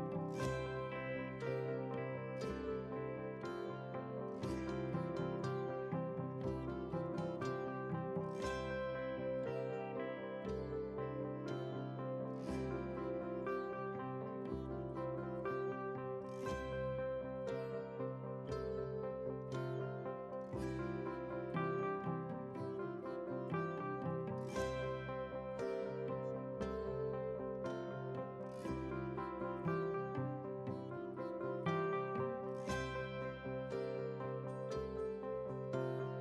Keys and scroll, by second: 4.5 ctrl+j, 12.4 ctrl+w, 16.0 ctrl+a, 16.6 ctrl+c, 19.5 ctrl+v, 23.4 ctrl+t.